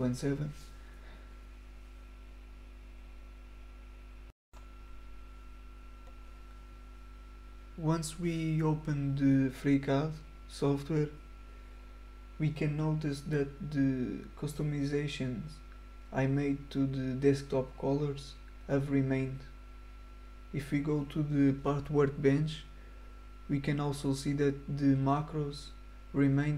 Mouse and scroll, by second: 0.0 click, 18.2 click, 19.2 click.